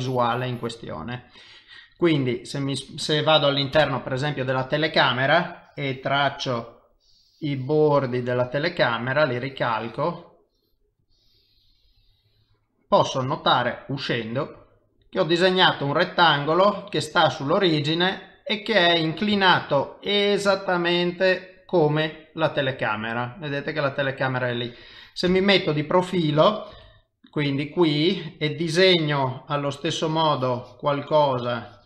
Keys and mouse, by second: 2.4 middle click, 3.7 KP_0, 6.9 click, 9.3 click, 11.0 click, 13.7 middle click, 16.0 middle click, 17.7 middle click, 19.5 ctrl+middle click, 20.2 ctrl+middle click, 20.6 middle click, 21.6 middle click, 22.7 middle click, 25.3 KP_0, 26.7 KP_1, 29.7 n, 30.1 click, 31.1 click.